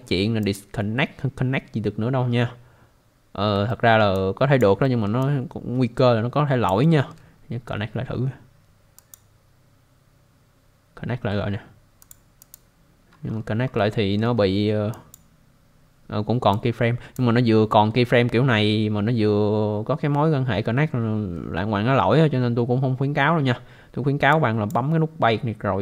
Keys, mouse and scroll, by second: 0.4 click, 3.7 alt+middle click, 4.1 alt+click, 4.8 alt+middle click, 5.2 alt+click, 6.8 alt+middle click, 9.0 click, 12.0 click, 12.4 click, 13.1 scroll down 1, 13.3 scroll up 1, 13.9 alt+middle click, 14.4 scroll up 1, 14.9 click, 16.5 click, 18.6 scroll down 1, 21.7-22.1 scroll down 1, 24.3 click.